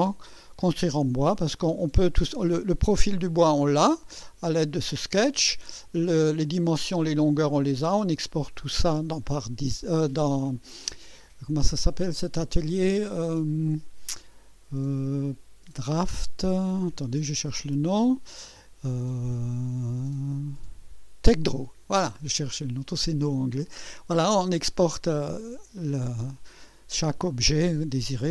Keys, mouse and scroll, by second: 0.2-1.8 drag, 6.6-7.5 drag, 17.7 click, 23.7 click, 25.5-26.3 drag, 27.2 click.